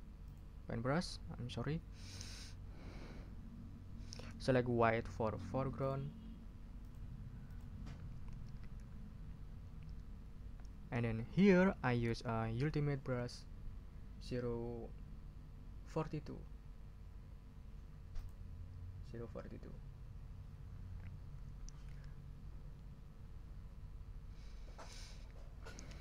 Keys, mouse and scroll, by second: 0.2 middle click, 0.4 click, 5.8 click, 6.8 click, 7.5 click, 14.0-15.0 scroll down 6, 15.4 scroll down 2, 16.0-16.8 scroll down 2, 17.2-17.8 scroll down 4, 18.1 click.